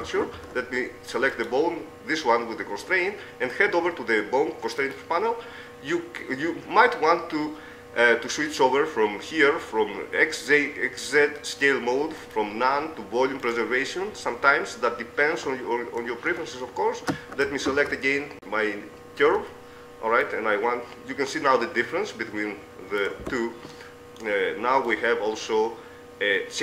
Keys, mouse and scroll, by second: 0.9 ctrl+Tab, 3.5-5.1 middle drag, 6.9-12.5 middle drag, 14.3-18.1 middle drag, 18.1 ctrl+Tab, 18.3-20.3 right drag, 18.3 z, 19.7 Tab, 22.3-24.1 middle drag, 23.5 z, 25.3-26.6 drag.